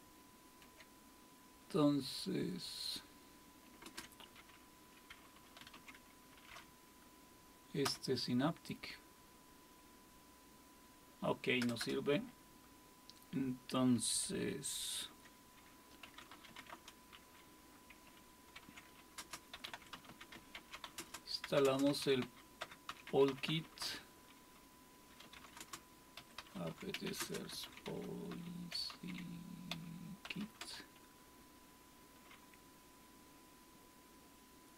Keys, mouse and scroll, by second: 2.3 Escape, 3.8 super+space, 5.3-6.2 typing, 7.8 Return, 11.6 Return, 11.8 Return, 14.8 super+1, 15.8-17.1 typing, 18.5-31.1 typing.